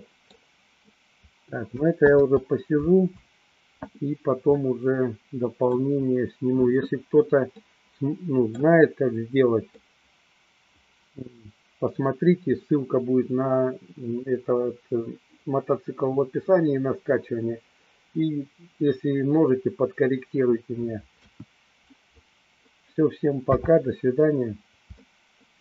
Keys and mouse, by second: 2.1 ctrl+z, 4.6-6.1 middle drag, 7.7-8.8 middle drag, 9.8-11.6 middle drag, 21.0 KP_1, 23.4 n, 25.2-25.6 shift+middle drag.